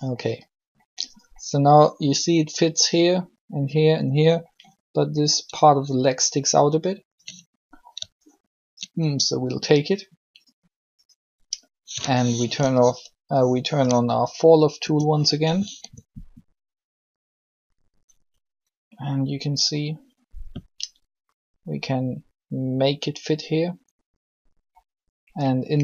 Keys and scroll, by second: 14.5 o, 15.7 r.